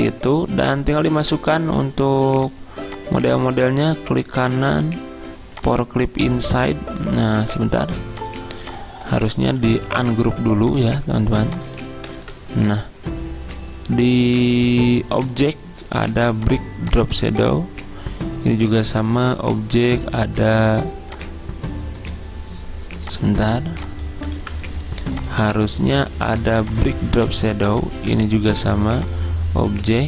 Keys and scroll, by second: 7.9 ctrl+z, 12.2 ctrl+z, 24.4 ctrl+z.